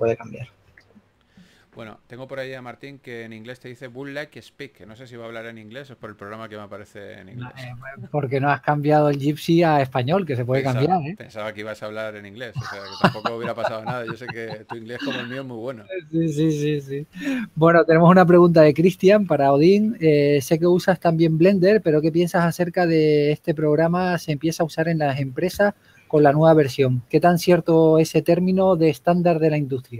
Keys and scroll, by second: 1.0 s, 3.5 s, 5.6 4, 9.0 2, 12.1 s, 14.0 s, 20.6 2, 21.4 4, 29.0-29.9 typing.